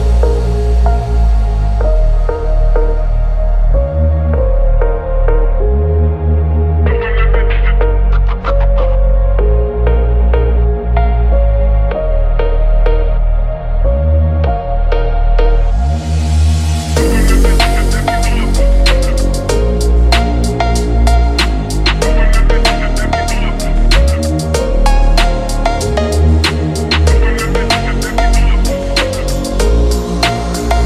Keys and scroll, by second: 0.2 shift+Down, 0.6 Up, 9.7 ctrl+0, 10.2 ctrl+=, 15.6 shift+x.